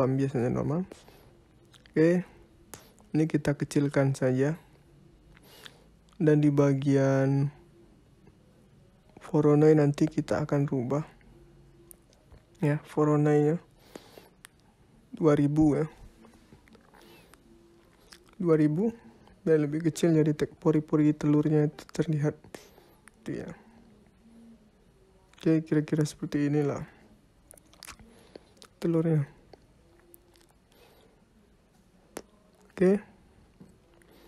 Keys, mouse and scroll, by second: 2.6 click, 7.0 click, 11.8 middle click, 15.9 click, 17.5 KP_0, 26.8 click, 33.4 scroll down 4, 33.9 middle click.